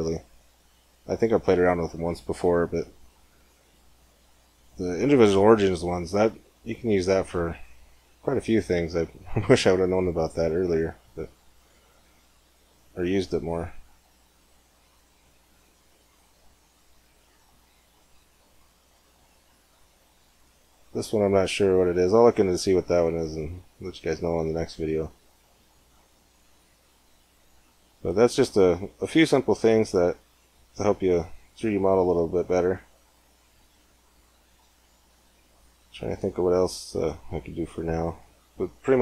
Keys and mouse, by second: 3.9-8.2 drag, 5.6 r, 8.6 click, 9.0-10.5 middle drag, 15.2-16.8 drag, 17.2-22.6 drag, 26.8-28.6 drag, 29.2 x, 30.8 shift+a.